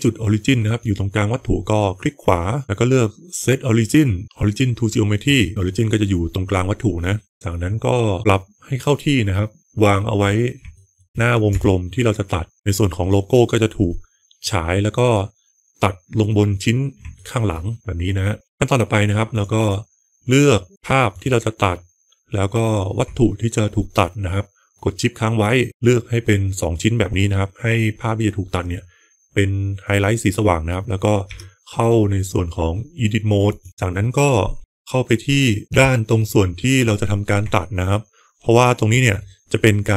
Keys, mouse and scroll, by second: 5.2 right click, 7.2 middle click, 9.6 KP_Enter, 9.6 KP_9, 9.6 KP_0, 9.6 KP_7, 10.6 shift+middle drag, 11.4 g, 12.5-13.6 middle drag, 12.5 g, 12.5 s, 12.5 KP_1, 14.3-16.1 middle drag, 17.0-17.3 shift+middle drag, 17.6-18.9 middle drag, 19.2 click, 21.0 click, 31.1 Tab, 35.6 KP_1, 37.5-38.8 middle drag.